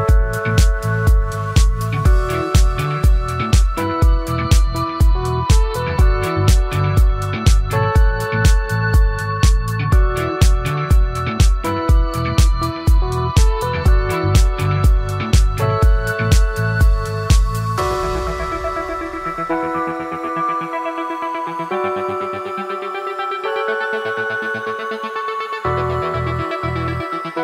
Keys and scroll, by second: 6.7 ctrl+space, 16.5 ctrl+a.